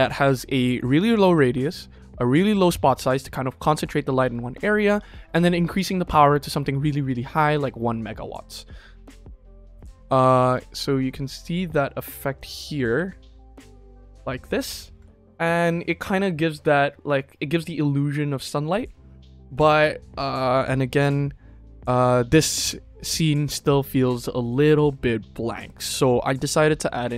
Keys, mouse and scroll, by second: 9.6 click, 11.6 click, 12.3 click, 12.9 KP_0, 14.9 ctrl+s, 26.8 click.